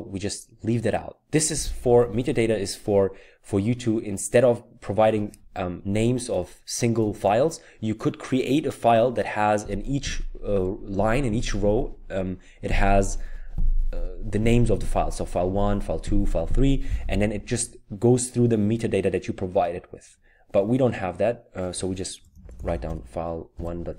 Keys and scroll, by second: 22.4-23.9 typing.